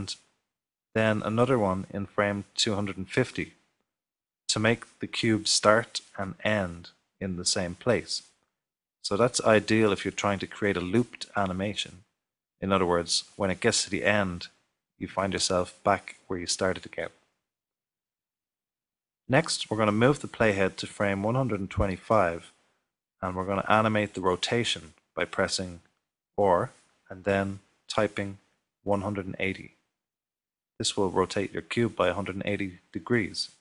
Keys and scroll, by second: 2.0-2.7 typing, 11.4 typing, 27.9-29.9 typing.